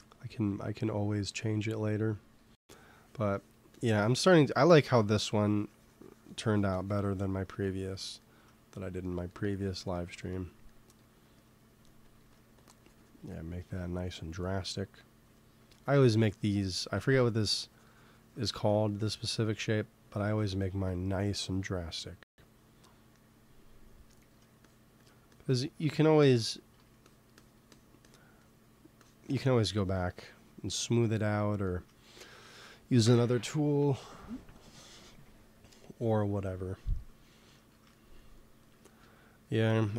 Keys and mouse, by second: 1.9 f, 2.6-6.7 drag, 6.8 click, 7.5-9.4 middle drag, 11.9 x, 12.1 f, 12.3-13.4 drag, 13.6 KP_1, 15.6 f, 15.9-18.5 drag, 16.9 ctrl+z, 17.1 f, 18.5 ctrl+z, 21.4 shift+c, 24.1 f, 24.5-30.7 drag, 30.7 middle click, 32.3 KP_1, 37.5-39.4 middle drag, 39.9 f.